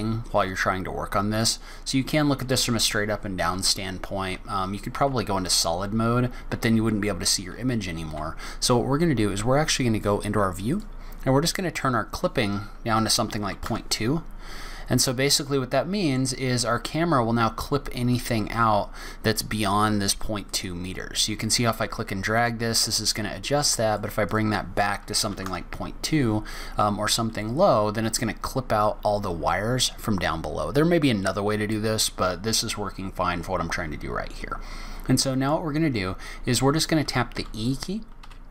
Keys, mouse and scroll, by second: 1.4 click, 4.3 z, 7.5 z, 10.7 click, 11.5 click, 15.4 middle click, 16.2-16.7 scroll down 3, 16.7 scroll up 1, 18.1 click, 20.4 click, 24.2 click.